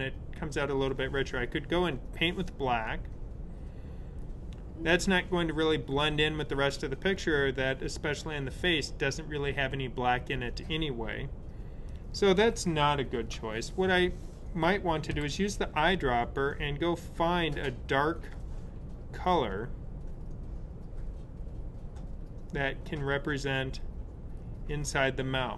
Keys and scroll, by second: 13.1 super+z, 15.1 i.